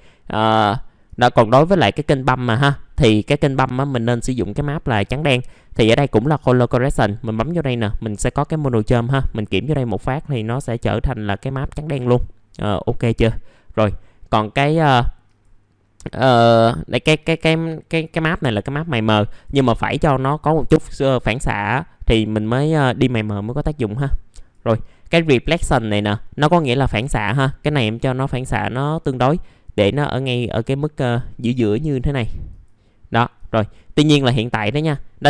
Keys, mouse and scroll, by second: 0.4 middle click, 1.0 click, 1.5 middle click, 2.9 click, 13.4 middle click, 15.2-31.6 drag, 31.6 click, 33.3-35.2 drag.